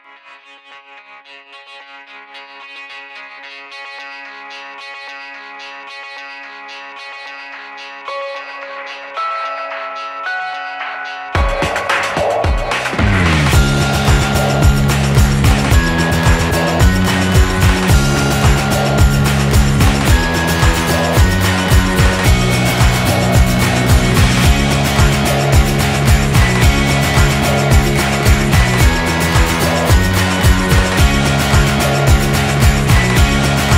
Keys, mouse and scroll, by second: 0.6-2.5 drag, 2.8-4.7 middle drag, 4.9-6.8 drag, 7.3-9.9 drag, 10.8 Tab, 11.7 e, 14.0 a, 14.1 a, 14.5 ctrl+n, 17.3-18.6 right drag, 18.2 s, 20.2 middle click, 20.8 e, 22.7 s, 25.5 f, 26.1 middle click, 26.4-27.9 right drag, 27.4 f, 28.5 Tab, 30.4 shift+d, 30.7 r.